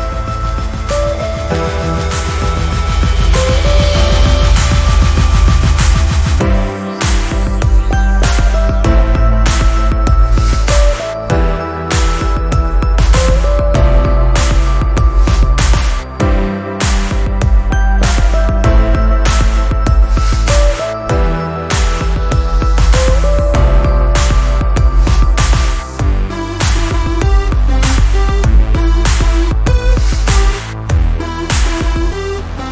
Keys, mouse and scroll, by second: 8.1 ctrl+scroll up 1, 8.9 ctrl+scroll up 1, 10.7-11.9 drag, 12.0 ctrl+scroll down 1, 12.9 ctrl+scroll down 1, 13.5 ctrl+scroll up 1, 14.9 p, 16.3 click, 20.7 ctrl+shift+v, 21.1-22.5 ctrl+scroll down 3, 22.5 scroll down 1, 23.0-23.9 ctrl+scroll up 2, 23.9-24.6 ctrl+scroll up 1, 24.6-25.7 ctrl+scroll up 1, 26.8 p, 29.9 click, 31.1 click.